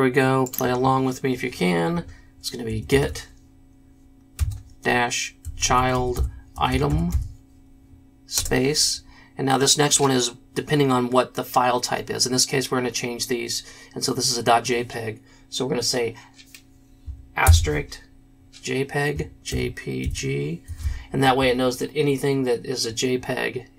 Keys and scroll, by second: 2.6-8.3 typing, 17.4 shift+KP_Multiply, 19.5 shift+j, 20.0 shift+p, 20.6 shift+g.